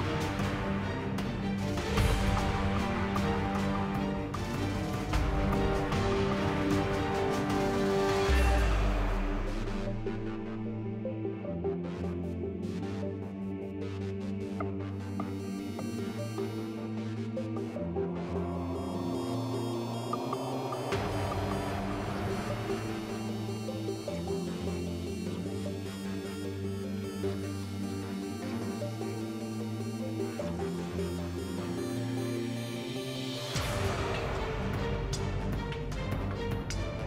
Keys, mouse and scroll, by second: 0.0 r, 1.6 Tab, 2.1 r, 4.6 Tab, 5.5 right click, 12.1 Tab, 13.7 Tab, 15.0 ctrl+r, 16.1 k, 19.4 ctrl+r, 21.9 k, 23.8 Tab, 24.2 z, 27.0 z, 27.7 shift+a, 29.1 KP_7, 31.2 r.